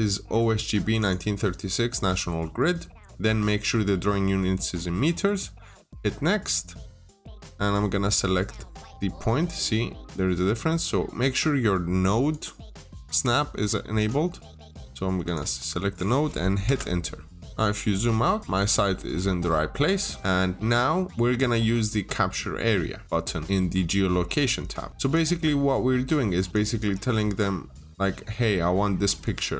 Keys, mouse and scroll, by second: 0.9 double click, 5.6 click, 7.2-8.4 scroll up 1, 12.1 click, 16.5 Return, 17.3-17.8 scroll down 2, 17.4 middle click, 18.1 middle click, 18.4 scroll up 1, 18.7-19.2 scroll down 2, 18.8 middle click, 19.7 middle click, 24.9 click.